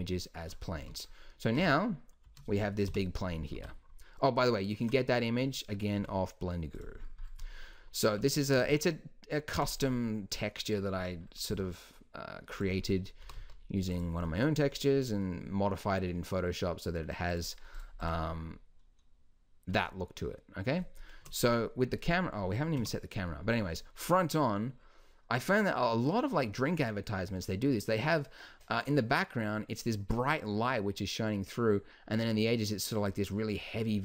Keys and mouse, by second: 0.8 z, 1.6 g, 2.9 KP_3, 3.6 r, 6.0 g, 8.2 z, 11.5 s, 13.2 g, 17.3-19.1 middle drag, 21.2 KP_0, 22.8 KP_1.